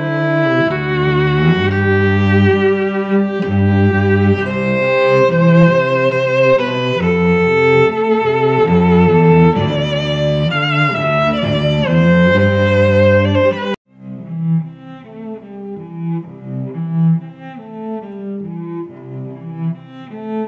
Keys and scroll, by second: 0.0 ctrl+t, 1.6 Return, 2.9 a, 4.5 ctrl+z, 5.5 shift+Left, 6.9 Return, 10.1 ctrl+z, 10.6 a, 11.7 Left, 13.2 F9, 14.4 Right, 14.8 Left, 15.6 Return, 16.0 v, 16.8 a, 18.2 shift+Right, 19.5 shift+Left, 20.3 Right.